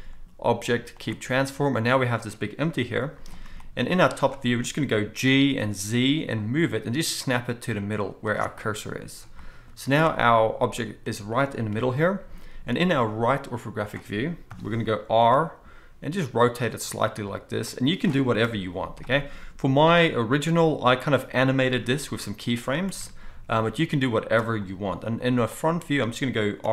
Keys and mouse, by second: 1.9 click, 2.7 KP_7, 3.9 z, 4.8-26.7 middle drag, 5.1 g, 9.7 z, 11.7 KP_3, 14.5 KP_3, 15.3 r, 18.4 KP_1, 21.7 g, 22.9 r, 26.6 r.